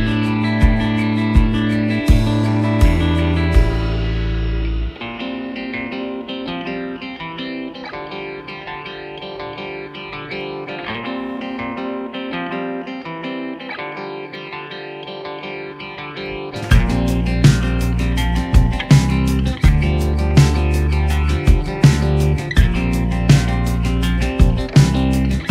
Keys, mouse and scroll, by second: 0.2 Return, 3.2 Return, 3.3 click, 4.9 click, 5.4 click, 5.5 d, 5.5 space, 5.6 Return, 18.0 space, 18.2 right click.